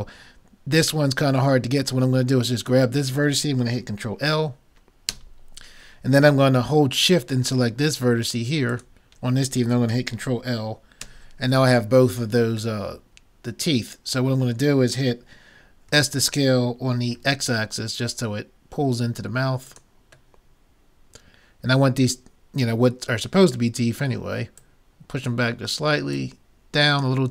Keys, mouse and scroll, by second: 2.6-4.4 drag, 4.4 middle click, 5.1 ctrl+l, 8.7-10.5 drag, 11.1 ctrl+l, 15.9 s, 20.4-21.7 middle drag, 24.6-27.3 drag.